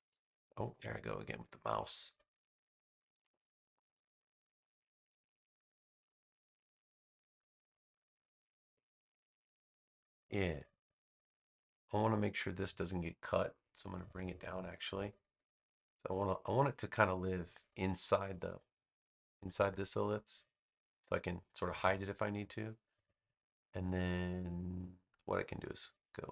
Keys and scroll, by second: 0.0 space, 2.2 space.